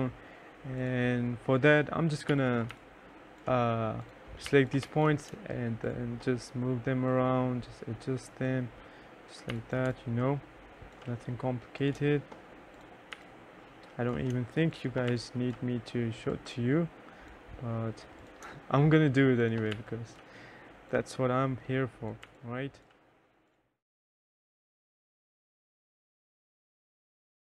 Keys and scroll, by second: 2.4 2, 2.8 3, 4.6 2, 4.9 1, 9.6 2, 10.0 3, 13.3 3, 15.2 3, 19.8 3, 21.4 3, 22.5-24.3 typing, 27.4 t.